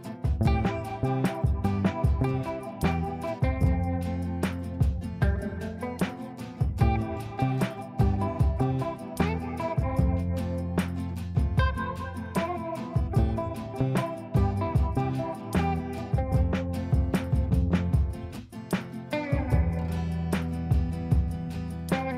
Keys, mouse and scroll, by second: 3.4 space, 4.1 F2, 4.8-5.4 drag, 6.5 right click, 8.1 click, 11.7 click, 12.5 click, 15.3 click, 19.5 click, 21.3 ctrl+space, 21.5-22.1 drag.